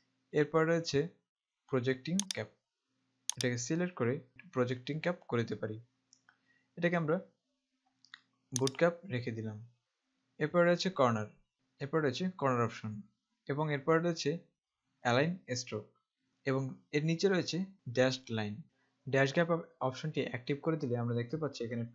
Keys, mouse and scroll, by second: 2.4 click, 8.8 click, 11.5 click.